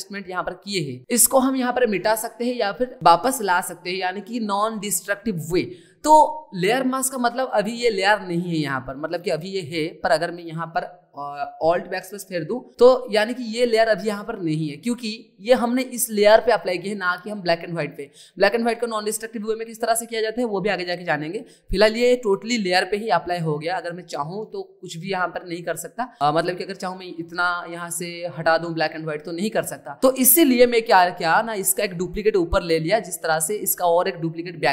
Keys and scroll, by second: 12.0 alt+BackSpace, 24.2 ctrl+z.